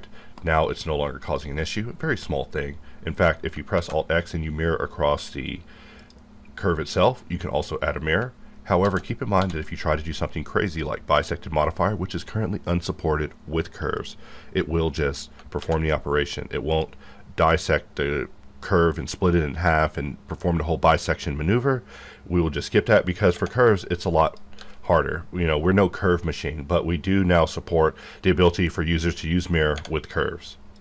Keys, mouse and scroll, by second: 2.9-3.4 scroll up 1, 3.8 alt+x, 6.0 click, 8.8 alt+x, 9.4 d, 10.6 click, 14.0 click, 15.6 alt+x, 16.7 click, 23.3 Tab, 24.2 click, 24.6 g, 24.9 right click, 29.8 Tab.